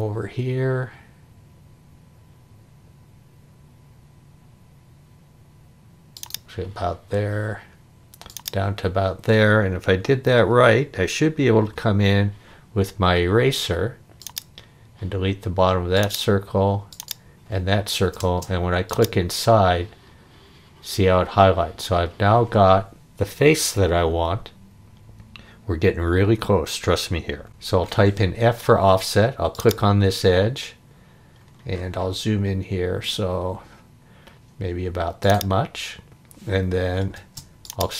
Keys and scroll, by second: 11.7 e, 18.2 space, 27.5 f, 37.2 space.